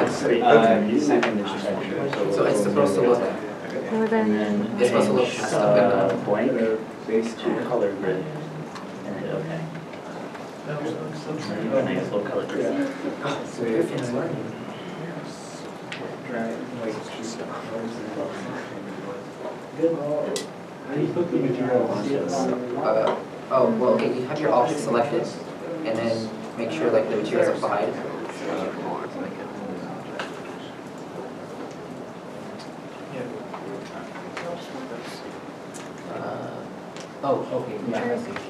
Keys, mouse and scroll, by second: 3.6 alt+a, 5.1 shift+middle click, 5.6 middle click, 7.6 scroll down 1, 9.0 shift+middle click, 10.4 middle click.